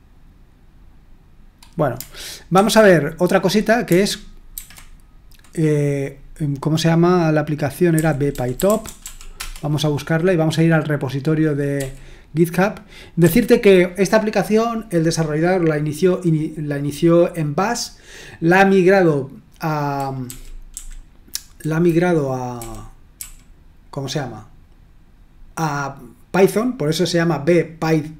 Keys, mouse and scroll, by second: 2.5 super+1, 4.5 ctrl+t, 7.7-9.5 typing, 11.7 f, 13.2 j, 20.2 Down, 20.7 Down, 22.5-23.2 typing.